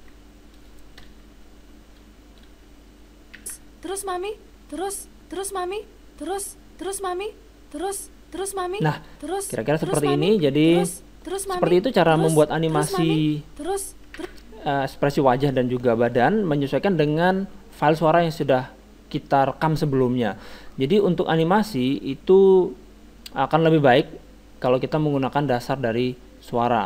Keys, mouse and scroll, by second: 1.0 KP_0, 3.4 alt+a, 9.0-12.5 middle drag, 14.2 alt+a.